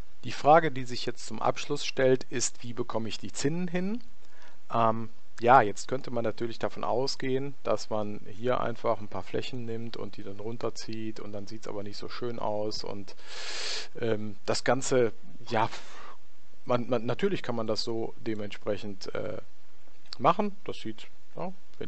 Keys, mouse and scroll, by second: 4.8-6.5 middle drag, 7.2 click, 8.4-11.3 right drag, 10.3 click, 14.7-16.4 middle drag, 16.5 middle click, 17.7 click, 19.9 ctrl+z, 21.0 ctrl+z.